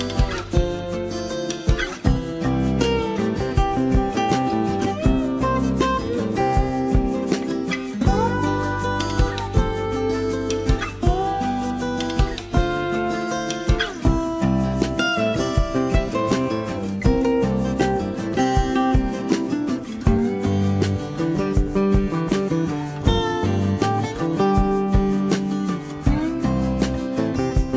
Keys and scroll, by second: 1.9 Return.